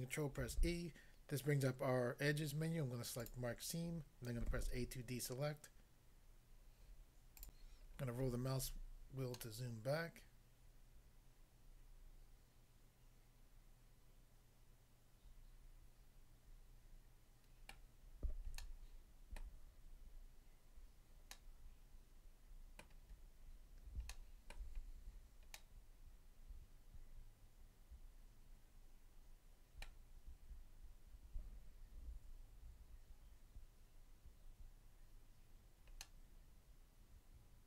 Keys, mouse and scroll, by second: 0.4 ctrl+e, 3.2 click, 3.3 click, 4.4 a, 7.4 click, 7.6 click, 7.9 scroll down 1, 9.4 middle click, 17.7 middle click, 18.6 shift+middle click, 21.3 middle click, 22.8 middle click, 23.5-24.1 scroll up 1, 24.1 shift+middle click, 24.8 scroll up 1, 25.6 middle click, 29.8 middle click, 36.0 middle click.